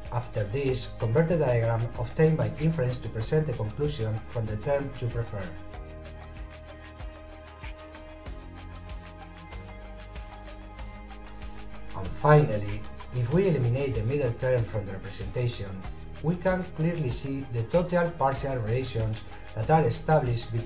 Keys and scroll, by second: 7.8 a.